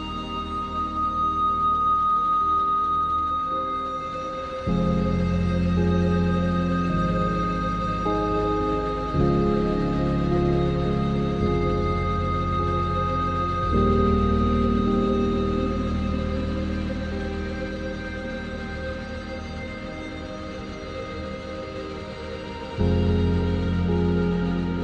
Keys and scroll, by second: 8.4 s, 8.8 s, 11.4 Tab, 12.8 ctrl+a, 13.2 Tab, 13.6 ctrl+z, 13.9 ctrl+z, 14.2 ctrl+z, 15.6 e.